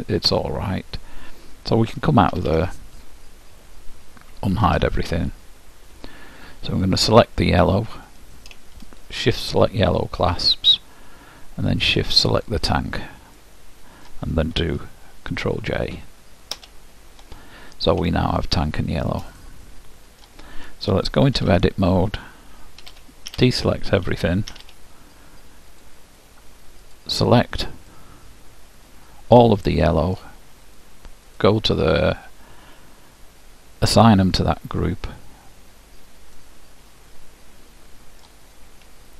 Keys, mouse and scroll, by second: 2.5 Tab, 3.6-4.7 middle drag, 4.7 alt+h, 7.2-10.8 drag, 12.2-13.8 drag, 12.9-15.4 middle drag, 16.8 ctrl+j, 18.6-21.4 middle drag, 21.6 Tab, 23.0 a, 23.4 a, 24.6 a, 25.9-28.9 drag, 28.1-30.1 middle drag, 31.4-33.4 drag, 34.1-35.9 drag, 36.6-38.4 middle drag.